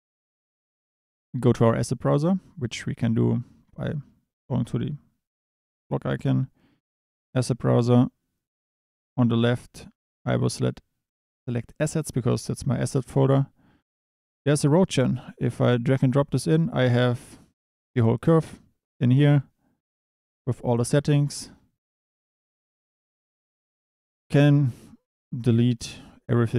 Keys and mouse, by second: 4.4-7.4 drag, 9.4-12.9 drag, 21.0 Tab, 22.3 a, 26.4 shift+drag.